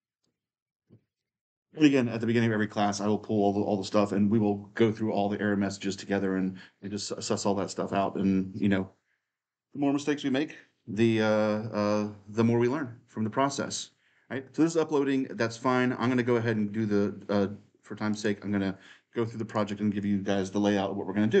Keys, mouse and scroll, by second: 0.0-1.1 drag, 1.1-15.1 middle drag, 17.9-21.4 drag.